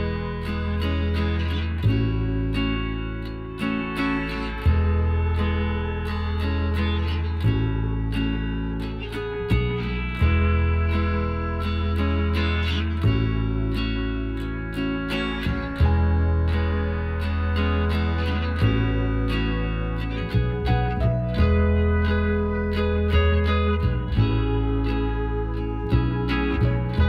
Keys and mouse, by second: 1.2 middle click, 2.1 middle click, 2.5 Tab, 2.7-4.0 right drag, 3.0 Tab, 3.5 click, 4.0-5.2 middle drag, 5.6 right click, 8.5-13.4 right drag, 12.7-14.3 drag, 17.5-19.8 right drag, 19.0-20.7 drag, 20.4-23.0 right drag, 22.1-23.7 drag, 24.9 Tab, 25.6 Tab, 26.7-27.0 right drag.